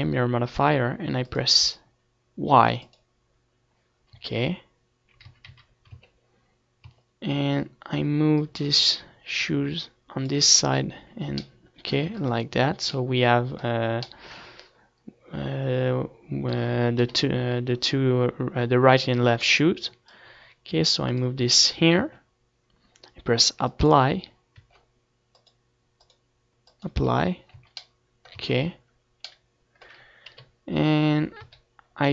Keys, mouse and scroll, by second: 2.7-5.0 drag, 5.0 Tab, 5.6 a, 5.9 a, 6.8 Tab, 7.7 Tab, 8.8-10.4 drag, 11.2 Tab, 11.3 z, 11.7 middle click, 12.3 ctrl+s, 14.9-16.1 middle drag, 17.1 KP_7, 17.6 z, 18.0-20.0 middle drag, 20.0-21.5 drag, 21.5-24.4 middle drag, 22.4 Tab, 24.4-28.8 drag, 24.8 Tab, 27.7 z, 28.8 Tab, 28.8 middle click, 30.3 KP_7, 30.8 z, 31.4 a.